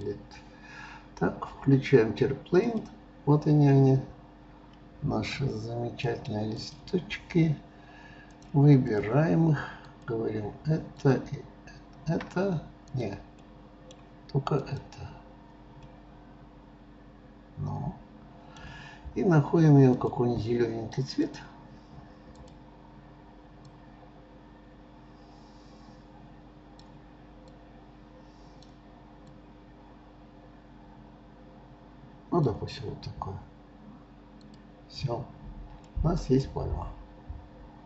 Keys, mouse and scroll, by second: 2.6 click, 3.6 scroll down 1, 3.7-6.6 middle drag, 6.6 click, 8.3-10.0 drag, 11.0 shift+click, 13.0 click, 13.5-14.6 middle drag, 14.6 click, 15.8-18.8 middle drag, 19.9-20.5 drag, 21.2 click, 34.4 click, 35.3-35.8 scroll down 2, 35.8-37.8 middle drag.